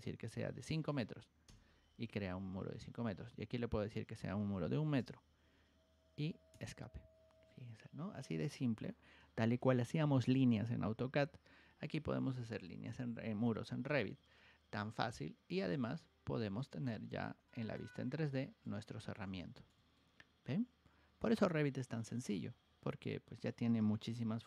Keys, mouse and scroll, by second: 6.4 Escape, 14.3 Escape, 15.5 click, 16.5 shift+middle click, 17.4 middle click, 18.0 scroll up 1, 18.1-18.6 scroll down 2, 18.6 shift+middle click, 19.3 middle click, 19.9-22.1 shift+middle drag.